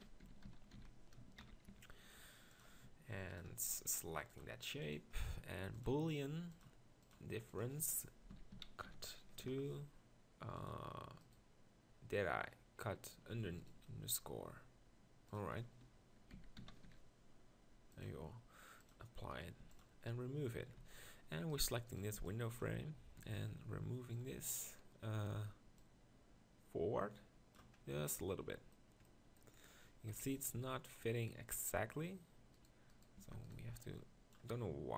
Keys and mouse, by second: 19.6 x, 20.8 z, 22.1 b, 23.2 b, 25.3 z, 27.7 middle click, 30.1 KP_1, 30.5 z, 33.2 Tab, 33.7 b.